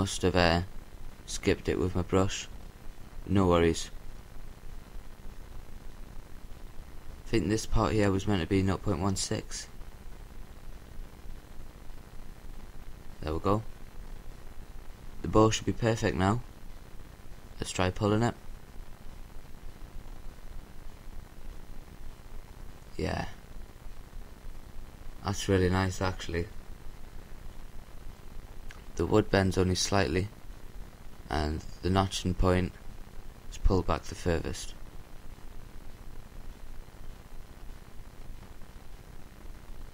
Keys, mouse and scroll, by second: 1.0-2.5 middle drag, 2.8-4.6 drag, 5.2-6.7 drag, 11.5-13.3 drag, 13.6-15.4 scroll down 1, 15.4 scroll down 1, 15.7-17.2 middle drag, 19.0 g, 30.7-32.2 right drag, 32.8 g.